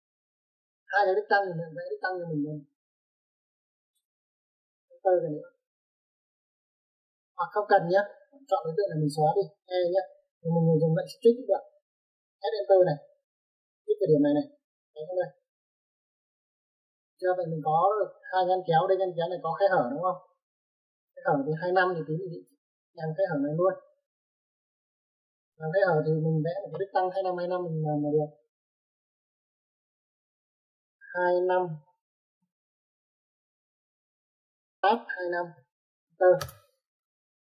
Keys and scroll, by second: 5.4 space, 7.5 Escape, 7.7 Escape, 10.0-10.9 typing, 12.7 typing, 31.6 2, 32.7 BackSpace, 33.2 5, 35.2 Tab, 35.7 typing, 36.8 Return.